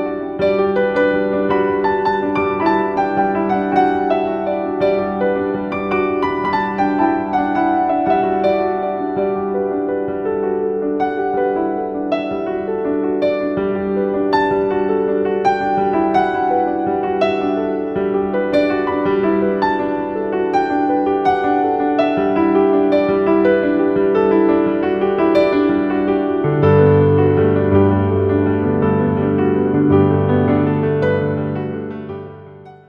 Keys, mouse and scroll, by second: 14.4-15.8 typing, 17.1-21.2 typing, 22.7 click, 25.5 click, 26.1 typing.